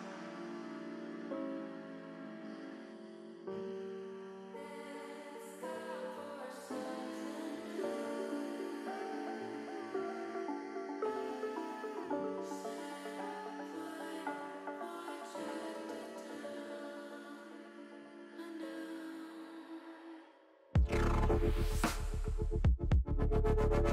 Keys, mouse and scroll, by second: 1.3 click, 1.8 click, 2.7 alt+shift+click, 3.7 alt+shift+click, 4.1 alt+shift+click, 4.6 middle click, 8.3 middle click, 9.1 middle click, 10.4 alt+shift+click, 11.0 middle click, 12.5 KP_1, 14.1 click, 16.3 click, 18.1 click, 19.5 click, 20.2-21.2 shift+middle drag, 22.0 s.